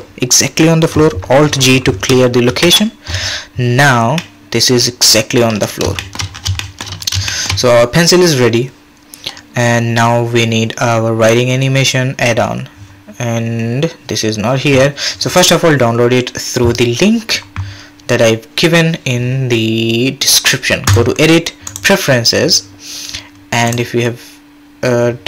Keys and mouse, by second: 2.5 alt+g, 4.2-4.7 drag, 4.9-5.4 drag, 6.0 shift+drag, 6.6 shift+drag, 7.3 shift+click, 21.1 click.